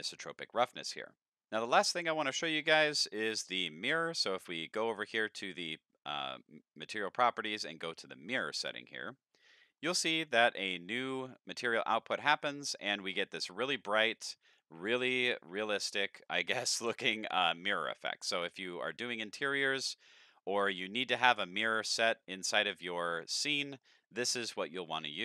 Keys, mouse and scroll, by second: 1.5 middle click, 2.0-2.4 scroll down 4, 2.4 middle click, 8.0 click, 9.5-10.2 scroll up 4, 9.8 middle click, 10.6 scroll up 1, 11.1 middle click, 11.1 scroll up 1, 12.2 middle click, 13.0-13.7 middle drag, 14.1 middle click, 14.8 middle click, 15.0 scroll down 4, 15.2-15.6 middle drag, 15.8 middle click, 16.0 scroll up 3, 16.3-16.6 middle drag, 18.6-19.2 middle drag, 19.9 scroll up 1, 20.1-20.7 middle drag, 21.0-22.7 middle drag, 23.3 middle click, 24.9 middle click.